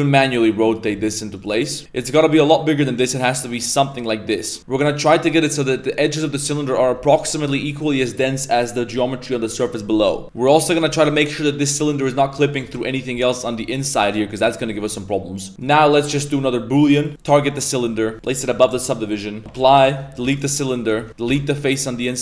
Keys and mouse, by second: 0.3-0.6 middle drag, 1.5 middle click, 1.9 s, 3.1 middle click, 3.4 g, 4.0-4.4 middle drag, 5.3 middle drag, 6.2 middle drag, 6.6 middle drag, 7.0 Tab, 7.0 middle drag, 7.4 Tab, 7.7 middle drag, 8.4 middle drag, 10.4 middle click, 11.3 middle click, 11.7 middle click, 12.1 shift+middle click, 12.4 shift+middle click, 12.8 shift+middle click, 13.2 shift+middle click, 13.7 middle click, 14.0 middle click, 14.4 middle click, 14.8 middle drag, 15.6 click, 16.0-17.1 drag, 18.1-18.7 drag, 19.6 ctrl+a, 20.0 right click, 20.2 x, 20.8 right click, 21.0 Tab, 21.1 3, 21.3 x.